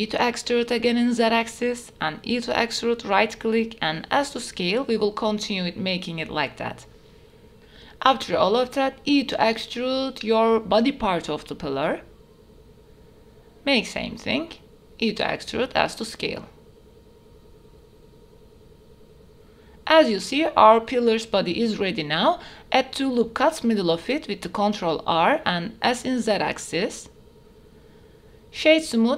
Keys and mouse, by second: 0.6 click, 1.6 e, 2.2 s, 3.2 click, 3.7 e, 4.4 z, 6.4 e, 6.4 s, 6.8 middle click, 7.6 shift+middle click, 8.4 e, 9.0 z, 12.0 shift+middle click, 12.4 middle click, 12.7-15.0 typing, 13.5 click, 14.1 click, 14.9 shift+middle click, 15.2 alt+click, 15.4 alt+s, 16.1 shift+middle click, 16.3-18.4 typing, 16.8 shift+click, 17.5 click, 18.1 click, 18.4 click, 18.6 Tab, 18.9-19.4 drag, 19.7 Tab, 20.1 shift+click, 21.3 ctrl+r, 23.9 s, 24.1 z, 26.6 click, 27.0 middle click, 27.3 Tab, 27.8 click.